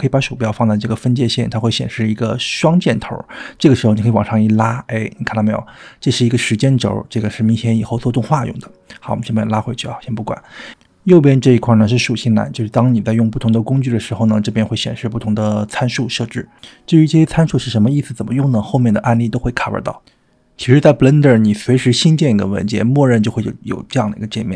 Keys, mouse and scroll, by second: 4.5-10.2 drag, 10.7 click, 13.0 drag, 13.6 drag, 14.2 click, 15.1 click, 15.9 drag, 16.4 click, 21.8 click, 23.0 click, 24.2 click.